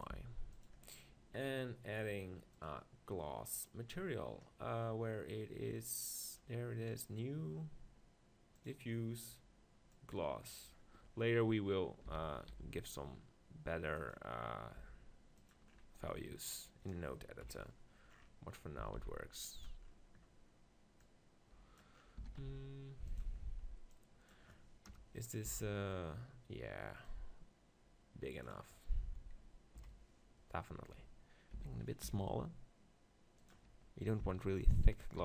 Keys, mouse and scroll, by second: 0.0-4.4 drag, 0.1 g, 7.0-10.7 drag, 12.1 s, 14.1-17.2 drag, 14.8 g, 17.2 middle click, 17.5 KP_1, 18.1-19.6 middle drag, 18.8 s, 21.0-22.8 drag, 22.2 s, 23.2-25.8 drag, 24.9 KP_0, 25.5 z, 27.1-28.9 drag, 29.7 KP_7, 30.4 middle click, 31.5 s, 33.5-35.2 drag, 34.7 s.